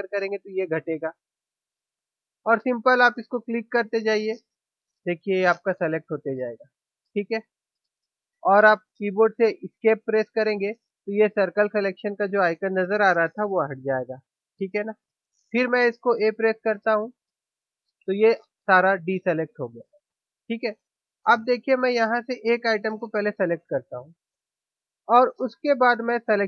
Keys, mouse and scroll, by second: 16.7 a, 23.6-25.3 drag.